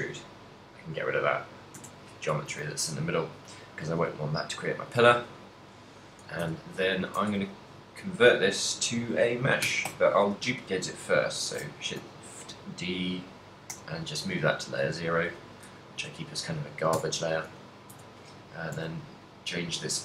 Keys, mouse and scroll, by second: 0.3 click, 1.3 click, 2.5 a, 2.8 middle click, 3.4 middle click, 4.1 KP_7, 5.2 z, 6.5 Tab, 7.2 Tab, 10.0 shift+d, 11.6 right click, 12.1 m, 14.9 right click, 16.1 KP_1, 17.0 Tab, 18.0 Tab, 18.8 alt+c.